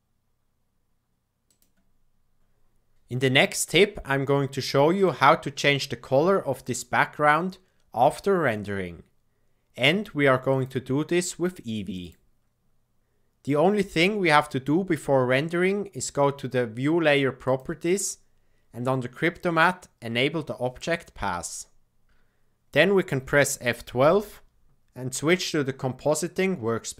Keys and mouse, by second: 10.4-12.2 drag, 17.4 click, 20.8 click, 24.7 F12.